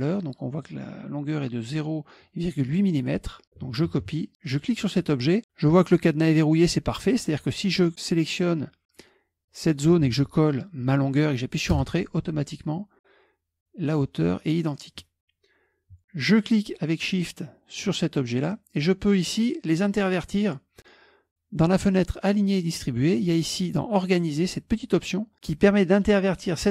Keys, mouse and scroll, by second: 0.2-1.2 drag, 4.0 ctrl+c, 4.5 click, 7.4 click, 9.5 click, 10.2 ctrl+v, 11.8 Return, 16.3 shift+click.